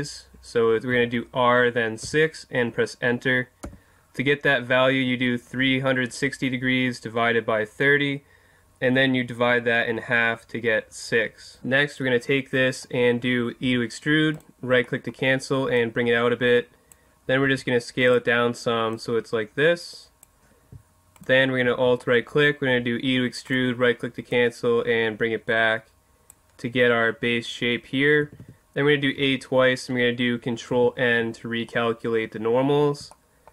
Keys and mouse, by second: 0.9 r, 12.0-13.8 middle drag, 13.6 e, 14.4-15.8 drag, 15.8-16.8 middle drag, 16.8 click, 17.4 s, 18.1-20.5 drag, 21.1 right click, 22.7 e, 24.3 click, 28.2 a, 28.4 a, 30.7 ctrl+n.